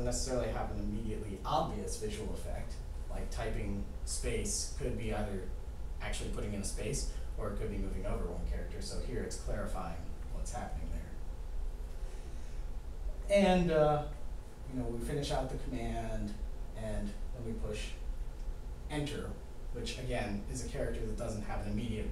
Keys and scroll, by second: 2.6 space, 13.1 o, 14.5 u, 15.9 shift+1, 17.3 Return.